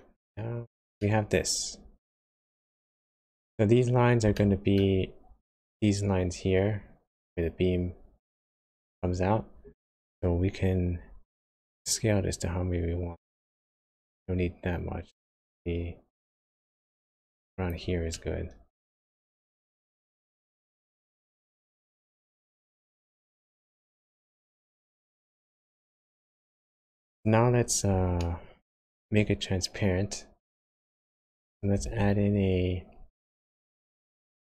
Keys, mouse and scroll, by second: 1.0 middle click, 4.3 shift+middle click, 5.0 scroll down 1, 11.8 click, 18.1 middle click, 20.1-20.7 scroll up 1, 21.0 shift+middle click, 22.3 click, 26.9 click, 28.2 shift+middle click, 28.7 shift+scroll up 1, 31.2 click, 31.8 shift+a.